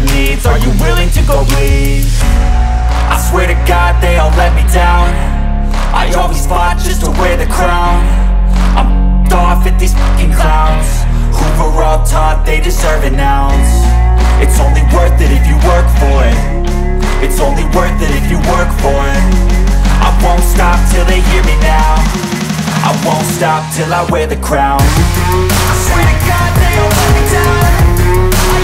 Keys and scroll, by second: 3.6 space, 11.6 Escape, 20.7 ctrl+z.